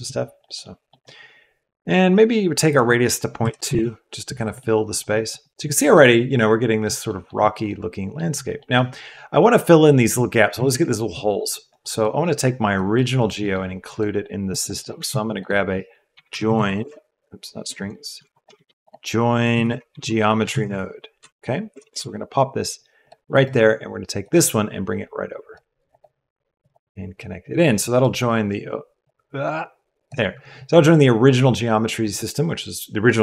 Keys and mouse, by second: 0.5 middle click, 1.0 middle click, 2.7-3.7 middle drag, 4.5-4.9 drag, 5.1 middle click, 5.7 middle click, 6.0-6.8 middle drag, 7.0 drag, 7.4 click, 7.6 click, 8.5 middle drag, 8.8 click, 11.6 click, 12.3 click, 12.7 click, 13.8 click, 14.7 click, 14.9 shift+a, 18.1 x, 18.3 click, 18.5 shift+a, 20.5 BackSpace, 24.1 click, 24.4-25.8 drag, 26.5-27.7 drag, 29.2-30.1 drag.